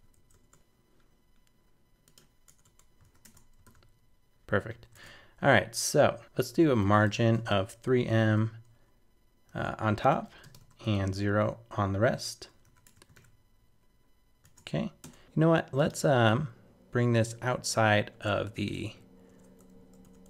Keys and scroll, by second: 3.0 super+s, 3.2 super+Tab, 3.6 super+r, 4.9 super+Tab, 12.6 super+s, 12.8 super+Tab, 13.1 super+r, 14.4 super+Tab, 17.6 super+c, 18.6 super+BackSpace.